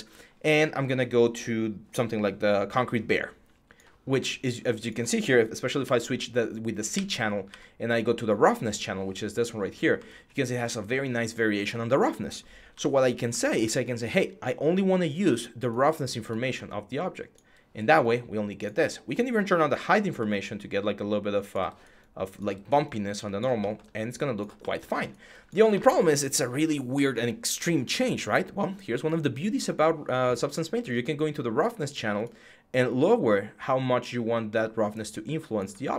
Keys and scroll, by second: 5.6 c, 7.3 typing, 12.5 m.